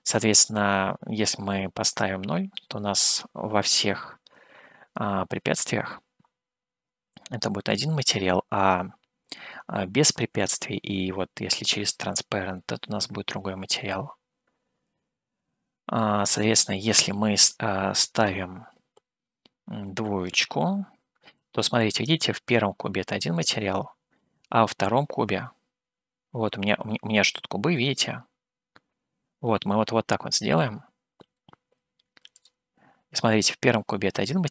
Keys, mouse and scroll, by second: 2.8-16.2 middle drag, 18.2-20.5 drag, 21.8-23.7 middle drag, 27.2 click, 27.7-30.5 middle drag, 32.5 click.